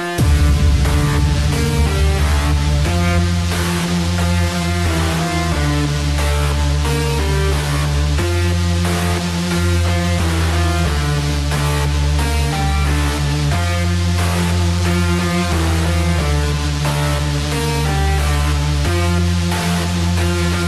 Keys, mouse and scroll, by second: 2.8-3.2 scroll down 6, 4.2 middle click, 4.2-5.1 scroll down 1, 5.1 scroll down 2, 5.4 Tab, 7.5 alt+h, 8.3-10.5 middle drag, 10.5 KP_1, 15.4-18.4 drag.